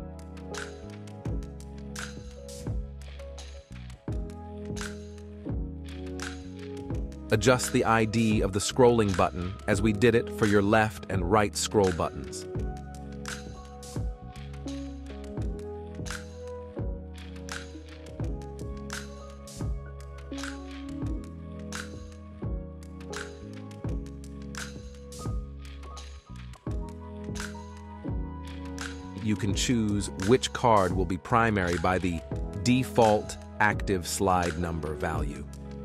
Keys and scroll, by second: 4.6 super+v, 9.3 super+c, 15.0 super+v, 18.4 super+c, 22.9 super+v, 26.6 super+v.